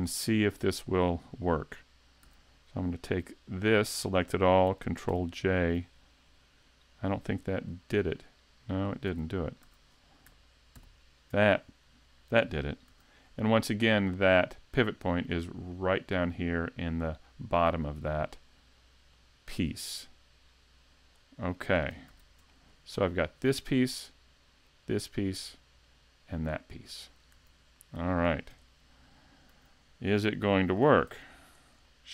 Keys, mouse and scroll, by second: 0.1 shift+middle click, 2.2 a, 2.7-3.1 scroll down 3, 3.3 scroll up 1, 3.7 middle click, 5.1 ctrl+j, 6.5 scroll up 2, 7.9 right click, 9.1 a, 9.7 a, 10.8 ctrl+j, 12.1 middle click, 12.9 a, 13.3 middle click, 14.2 right click, 15.3 scroll down 3, 15.7 middle click, 17.3 middle click, 19.1 shift+click, 21.0 shift+click, 21.6 shift+middle click, 22.1 a, 22.5 shift+middle click, 23.5 right click, 24.6 right click, 25.9 right click, 27.4 a, 27.8 middle click, 28.5 shift+c, 29.2 scroll up 3, 29.5 a, 30.2 a, 30.6 middle click, 31.1 s, 31.9 shift+middle click.